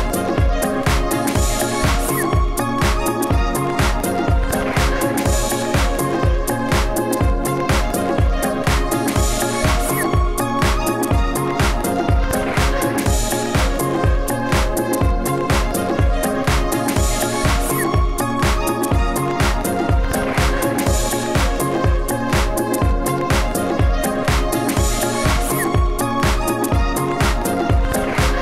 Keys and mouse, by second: 0.0-0.8 typing, 2.7 s, 2.9 s, 6.4 f, 6.8 s, 7.0 f, 7.8 f, 9.3 f, 11.9 s, 11.9 f, 12.2 s, 13.2 s, 14.4 f, 15.9 s, 16.4 f, 17.0 Tab, 17.2 Tab, 18.6 f, 20.0 s, 20.1 f, 20.6 f, 21.6 s, 22.8 s, 26.3 s, 26.4 f.